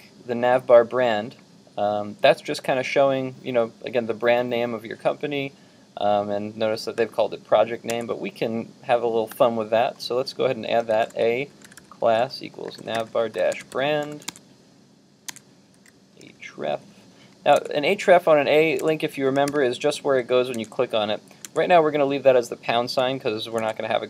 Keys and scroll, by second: 7.9 super+Tab, 14.3 super+Tab.